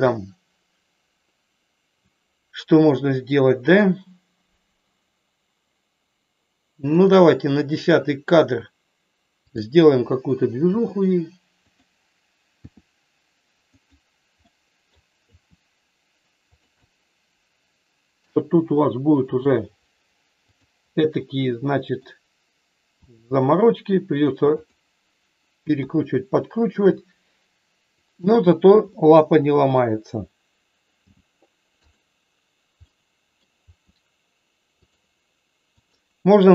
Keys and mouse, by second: 7.0 click, 10.8 g, 11.6 click, 12.6 r, 13.8 click, 14.4 middle click, 15.3 r, 16.8-18.1 middle drag, 18.5 r, 20.5 click, 21.1 middle click, 23.0 r, 25.8 KP_1, 28.3 click, 28.9 middle click, 31.0 g, 31.9 click, 32.9 middle click, 33.6 r, 34.8 click, 35.8 click.